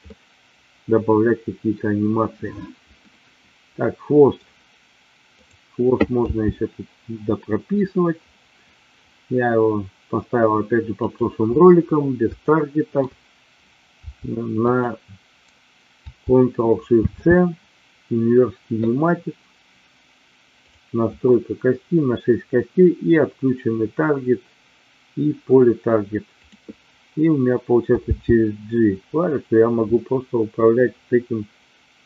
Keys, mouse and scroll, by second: 0.0 scroll up 1, 0.1-1.6 middle drag, 1.6 scroll down 1, 3.0 scroll up 1, 3.1-4.5 middle drag, 5.4 click, 6.4 g, 12.5 shift+middle click, 14.5 click, 17.0 ctrl+shift+c, 26.2 click, 28.1 g.